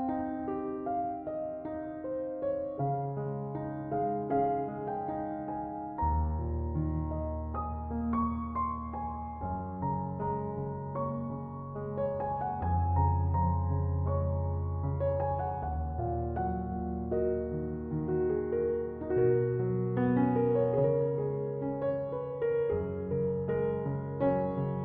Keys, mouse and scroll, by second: 0.8 click, 1.2-2.5 drag, 2.5-4.2 scroll up 2, 4.2-7.2 drag, 9.6-12.6 drag, 13.9-15.8 middle drag, 15.8-16.4 scroll up 1, 16.4-17.0 scroll up 1, 17.0-20.0 middle drag, 21.3 click.